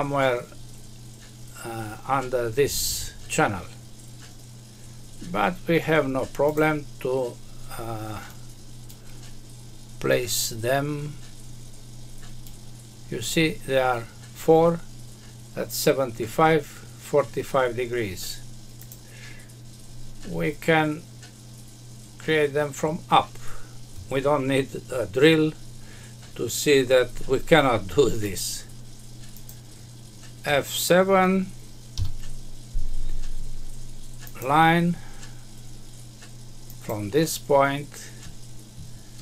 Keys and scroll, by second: 31.9 F7.